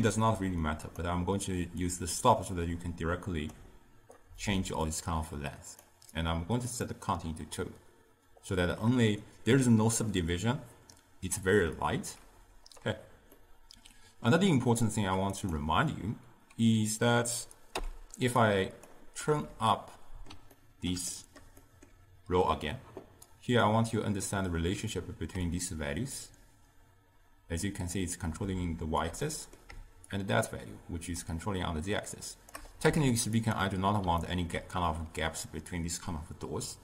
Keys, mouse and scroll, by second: 0.9 click, 1.9-9.8 drag, 13.4-15.4 middle drag, 15.4 click, 17.8 m, 18.5 click, 19.3-23.4 middle drag, 23.4 click, 25.6-28.6 shift+drag, 29.3 middle click, 30.2-32.9 shift+drag, 32.9 z, 34.3-36.8 ctrl+middle drag.